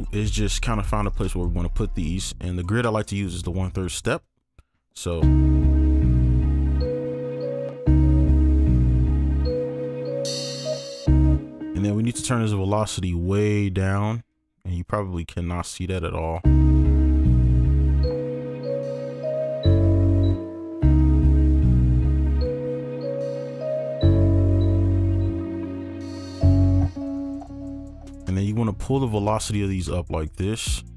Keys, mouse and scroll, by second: 5.2 space, 7.7 space, 9.0 double click, 11.1 space, 12.3 space, 16.4 space, 20.3 space, 20.8 space, 26.8 space, 27.2 right click.